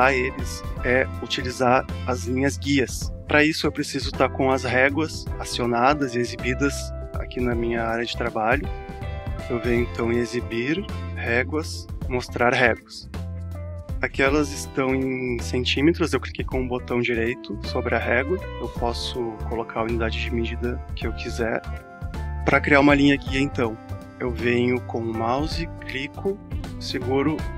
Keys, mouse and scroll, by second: 1.6-9.7 alt+drag, 13.1 click, 15.7 right click, 24.4 click.